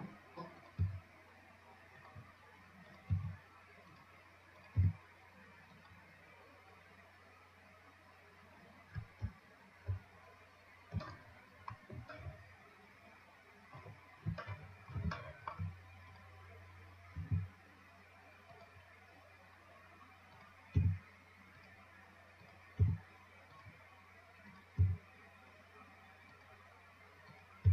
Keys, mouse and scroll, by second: 0.8 click, 1.1 g, 3.1 click, 4.8 click, 7.3 scroll down 2, 9.6 shift+scroll up 5, 10.5-10.8 scroll up 3, 11.4-15.2 shift+middle drag, 15.2 shift+scroll up 1, 15.5 shift+middle click, 16.4 click, 17.5 g, 20.6 click, 21.0 g, 22.7 click, 23.1 g, 24.7 click, 25.0 g, 27.5 click.